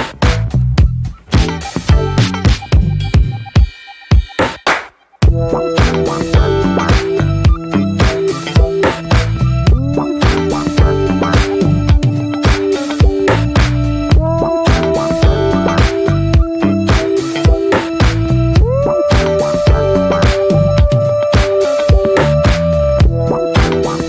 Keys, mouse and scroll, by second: 1.6-3.1 middle drag, 3.1-3.7 drag, 3.7 middle drag, 3.9 click, 4.2 middle click, 4.3 ctrl+scroll up 1, 4.4 ctrl+s, 4.5 click, 4.8 Tab, 5.2 middle click, 5.6 p, 7.0 click, 7.3 ctrl+s, 7.5 Tab, 7.6 click, 8.0 Tab, 8.3 drag, 8.5 alt+middle click, 8.7 alt+middle click, 8.9 alt+scroll up 1, 9.0 ctrl+s, 9.2 click, 9.5 shift+middle click, 9.8 ctrl+s, 11.0-11.7 drag, 11.7-13.8 middle drag, 13.8 ctrl+z, 13.9-14.3 scroll up 3, 14.3 scroll down 2, 14.7 alt+middle drag, 15.0 shift+middle drag, 15.2 scroll up 1, 15.3 drag, 15.5 scroll down 1, 15.7-16.0 middle drag, 16.0 ctrl+s, 16.0 click, 16.5 scroll down 1, 16.7-17.0 middle drag, 17.0 shift+click, 17.5 ctrl+j, 18.2 click, 19.2-19.6 drag, 20.0 alt+middle click, 20.6 scroll down 1, 20.8-21.2 shift+middle drag, 21.2 scroll up 1, 21.3 scroll down 2, 21.5-23.0 middle drag, 23.0 scroll up 1, 23.2-24.0 shift+middle drag.